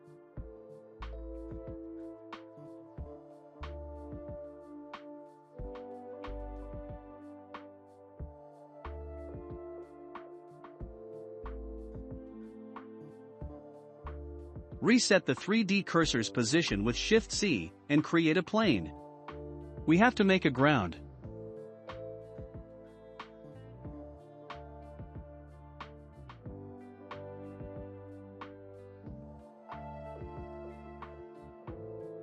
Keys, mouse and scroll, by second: 0.7-1.1 scroll down 2, 1.1-2.5 middle drag, 2.5-4.7 drag, 4.7-7.8 shift+middle drag, 8.6-10.0 drag, 10.0-11.2 middle drag, 11.2 click, 11.7-12.1 scroll down 1, 12.1 middle click, 12.7 ctrl+c, 13.0 click, 13.5 shift+c, 15.1 middle click, 16.0 shift+a, 19.4 click, 21.0 s, 23.9-25.8 shift+middle drag, 25.8-26.3 scroll up 3, 26.3 middle click, 26.8 scroll up 3, 27.7 click, 30.0-30.4 scroll down 2, 30.6 shift+middle click, 31.5-32.1 scroll down 2, 32.1-32.2 shift+middle drag, 32.1 scroll down 2.